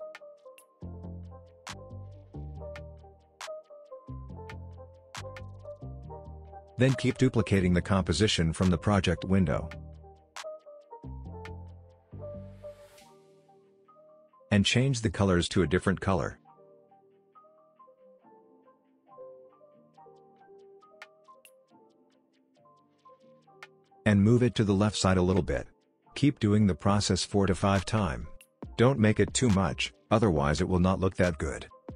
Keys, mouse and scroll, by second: 1.9-2.5 drag, 3.6 ctrl+z, 4.3 click, 7.1 ctrl+d, 8.1 click, 11.5-13.3 drag, 23.3-25.8 drag, 26.3 click, 26.6 ctrl+d, 26.8 click, 27.2 p, 27.4 click, 29.4 click, 29.6 ctrl+d, 29.7 click, 30.1 p, 30.3-30.7 drag.